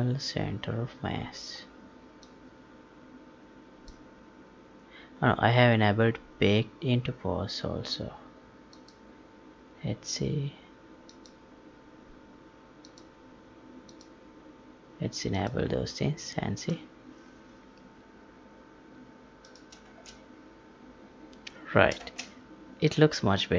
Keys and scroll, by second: 19.8 space, 21.9 space.